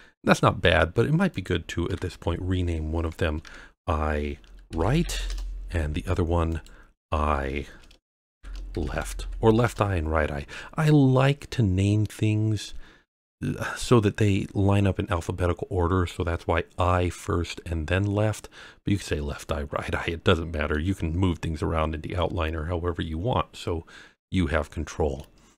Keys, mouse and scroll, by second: 1.3 click, 1.8 F2, 6.4 click, 7.0 F2, 18.9-20.7 middle drag, 22.9-23.4 scroll up 2, 23.4-24.0 scroll down 2, 24.6-25.1 middle drag, 25.4 scroll down 2.